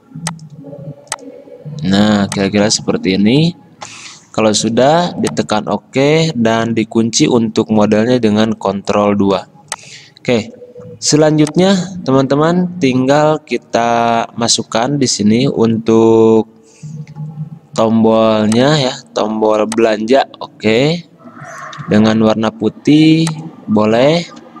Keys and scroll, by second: 8.8 ctrl+2, 22.0 d.